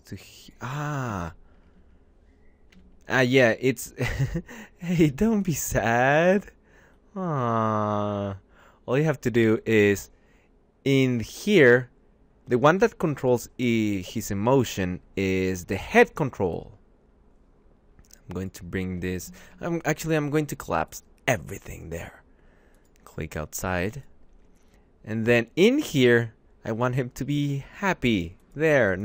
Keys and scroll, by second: 1.0 ctrl+z, 2.4 v, 14.2 `, 19.1 ctrl+a.